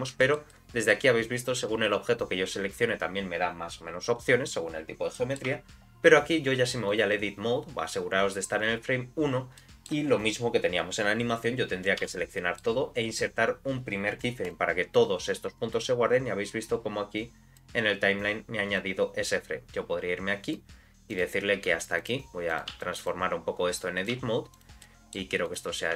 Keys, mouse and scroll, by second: 0.2 shift+middle click, 0.5 middle click, 1.8 click, 2.6 click, 4.2-4.5 scroll up 2, 5.1 middle click, 5.5 Tab, 5.9 scroll down 1, 6.9 click, 9.6 middle click, 12.0 a, 12.4 middle click, 14.4 click, 17.2 click, 18.8-20.5 drag, 21.1 click, 21.6 g, 22.5 click, 22.7 g, 24.0 click, 24.1 g, 24.8 middle click, 25.4 click.